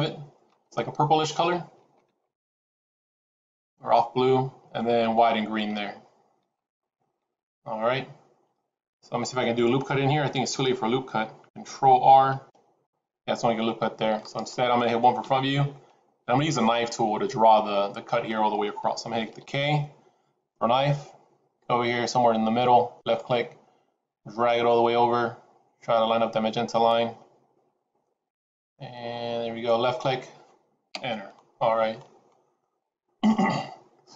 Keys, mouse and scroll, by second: 12.3 ctrl+r, 15.1 KP_1, 16.4 shift+middle click, 17.1-17.6 scroll up 2, 17.6 shift+middle click, 19.2 k, 31.6 scroll down 2, 31.9 middle click.